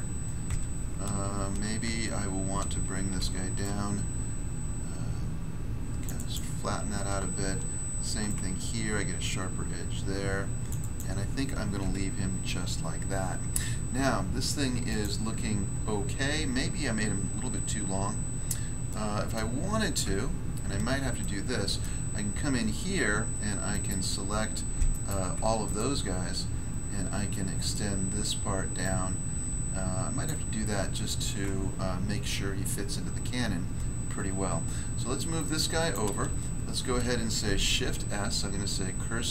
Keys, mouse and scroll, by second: 0.4 ctrl+Tab, 3.1 ctrl+r, 3.6 click, 6.0 click, 6.1 click, 6.3 click, 7.8 ctrl+r, 8.2 ctrl+click, 10.6 ctrl+click, 10.7 ctrl+click, 10.9 ctrl+click, 11.7 Tab, 12.3 scroll down 1, 12.9 scroll down 1, 14.8 click, 14.9 click, 18.0 scroll down 1, 18.8 middle click, 19.3 middle click, 20.0 Tab, 20.6 scroll up 1, 21.2 middle click, 21.7 middle click, 22.0 scroll up 1, 23.0-23.7 scroll up 1, 23.7 right click, 23.8 right click, 24.8 alt+right click, 25.0 alt+right click, 25.6 middle click, 25.6 scroll down 1, 25.7 middle click, 26.6-27.3 scroll down 1, 27.3 middle click, 27.3-27.7 scroll down 1, 27.7 middle click, 28.8 click, 30.2 click, 31.4 Tab, 31.8 scroll down 1, 35.1 click, 35.9 click, 37.4 s.